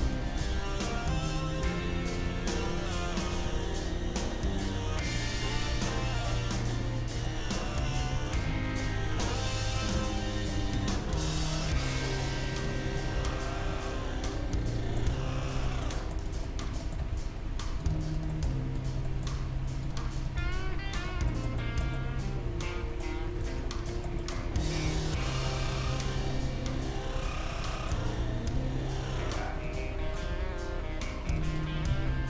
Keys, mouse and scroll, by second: 1.7 g, 2.7-5.0 right drag, 3.4 g, 6.1-8.3 middle drag, 7.7-9.2 right drag, 8.0 g, 9.2-11.6 middle drag, 9.9 g, 11.0-12.7 right drag, 11.2 g, 12.9-14.0 right drag, 13.2 g, 14.0-15.4 middle drag, 15.4-18.0 right drag, 17.0 g, 18.2-22.1 right drag, 19.3 g, 19.9 middle click, 20.4 g, 21.3-23.8 middle drag, 23.4 Tab, 24.9 Tab, 25.7-28.1 right drag, 28.1-29.4 middle drag, 28.1 g, 30.1-32.2 right drag, 30.3 g, 31.9 g.